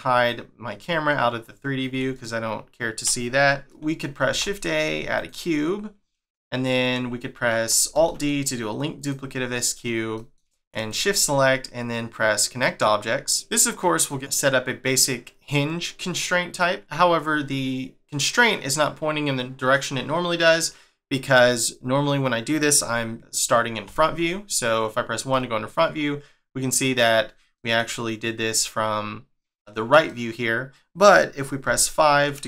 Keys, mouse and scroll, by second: 0.1 click, 1.4-2.1 scroll up 1, 2.1 shift+middle click, 3.7 scroll up 1, 9.3 scroll up 2, 9.7-10.1 scroll down 1, 10.1 shift+middle click, 10.9 shift+click, 13.3 click, 13.5 scroll down 1, 13.8 middle click, 16.6 middle click, 16.8 scroll up 1, 18.4 middle click, 21.7 middle click, 25.3 middle click, 27.5 middle click, 30.0 middle click, 31.6 5.